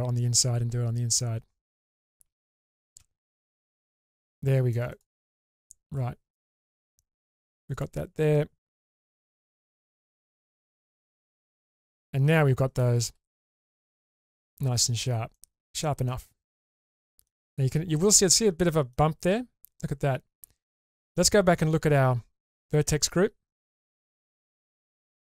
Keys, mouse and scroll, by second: 2.4 shift+click, 3.8 ctrl+x, 4.1-4.7 middle drag, 4.9 click, 5.9-6.3 scroll down 1, 7.2 1, 7.7 click, 9.1 g, 9.2 g, 10.1 click, 10.7 Tab, 11.7-12.8 scroll down 2, 12.1-12.8 middle drag, 13.0 shift+space, 13.6-14.8 middle drag, 14.9-15.3 scroll down 2, 15.3-17.3 middle drag, 17.6-18.1 scroll up 3, 18.1-19.0 middle drag, 19.2-20.7 scroll up 2, 20.7-21.2 scroll up 1, 22.5 click, 23.7 click, 24.2 Tab.